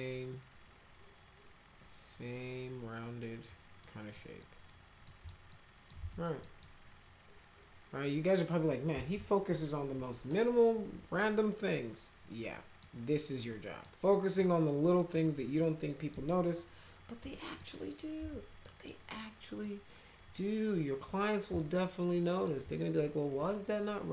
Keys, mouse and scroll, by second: 3.8 middle click, 4.4 middle click, 5.0 alt+middle click, 5.5 alt+middle click, 6.0 z, 6.4 middle click, 10.3-11.8 middle drag, 12.4 middle click, 13.5 middle click, 14.4-15.1 middle drag, 15.2 middle click, 15.9 middle click, 17.2 p, 17.6 middle click, 18.2 z, 18.6 middle click, 19.6 middle click, 20.4 middle click, 21.1-22.5 middle drag.